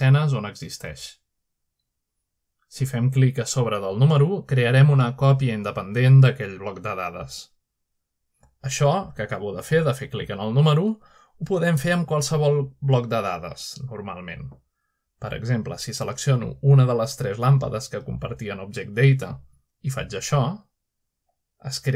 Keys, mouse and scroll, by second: 0.0-2.4 middle drag, 3.0 middle click, 3.8-4.8 middle drag, 6.2 click, 9.5-10.4 middle drag, 10.7 shift+middle click, 13.6-20.0 middle drag, 20.0-20.8 drag, 21.2-21.9 middle drag.